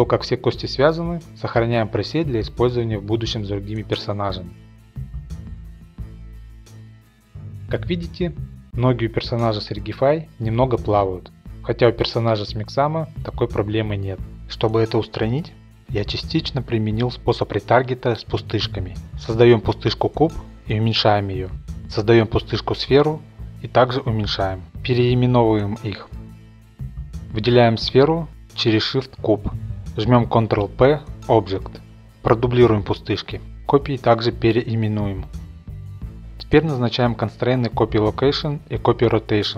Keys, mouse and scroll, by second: 0.5 middle click, 1.1-1.8 scroll up 5, 1.8-2.3 scroll, 2.3 click, 2.6-5.5 typing, 3.0 shift+click, 5.5 Return, 5.9 click, 6.6 click, 7.3-8.0 scroll, 8.1 shift+middle click, 8.1 scroll, 8.8 middle click, 12.8 middle click, 12.9-14.5 scroll, 14.5 shift+right click, 15.2 click, 15.5 click, 15.9 click, 16.5 a, 18.2 click, 19.8 click, 20.4 a, 21.3 click, 22.8 click, 23.0-23.6 scroll, 23.6 middle click, 23.9 shift+middle click, 24.2 click, 24.8 click, 24.8 click, 25.0-26.8 typing, 25.7 click, 25.8 click, 27.7 click, 28.5 shift+click, 29.5 ctrl+p, 30.8 click, 31.0 middle click, 31.3 d, 32.1 click, 32.3 shift+middle click, 33.0 click, 33.7 click, 34.5-35.3 typing, 34.7 Return, 34.8 click, 34.9 click, 35.3 Return, 35.5 click, 35.7 middle click, 36.0 click, 36.9 click, 37.1 click, 37.7 click, 37.9 click, 38.3 click, 38.8 click.